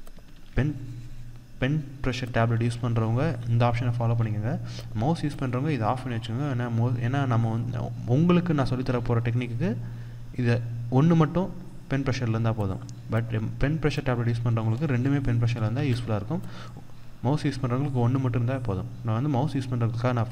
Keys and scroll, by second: 15.3 ctrl+z, 18.4 ctrl+z.